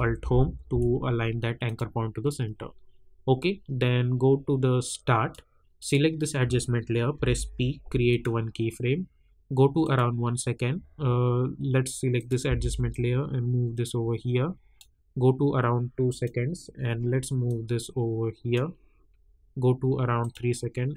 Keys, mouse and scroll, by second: 0.2 ctrl+alt+Home, 1.6 click, 4.8 click, 7.1 p, 8.1 click, 12.1 click, 12.4 v, 12.9-20.9 drag.